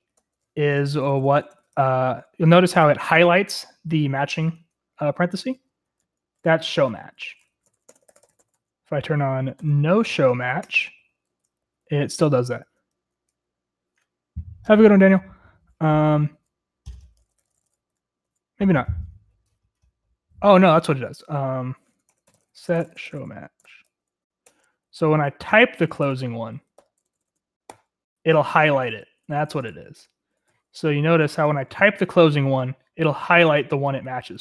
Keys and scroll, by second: 0.0-13.2 typing, 1.8 Escape, 15.9-18.7 typing, 20.3-27.7 typing, 24.5 Return, 29.2-31.6 typing, 30.0 Return.